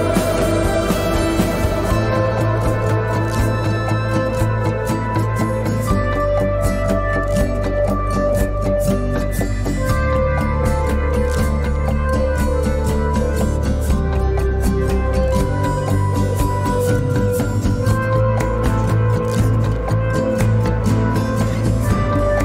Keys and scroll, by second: 21.1 F4.